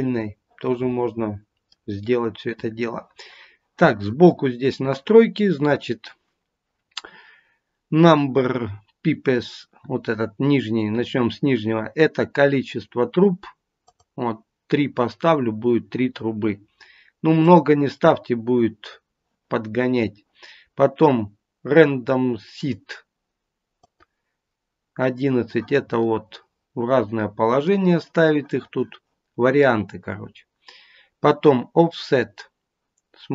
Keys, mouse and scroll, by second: 13.8 click, 17.3 click, 23.7 click, 26.0 middle click.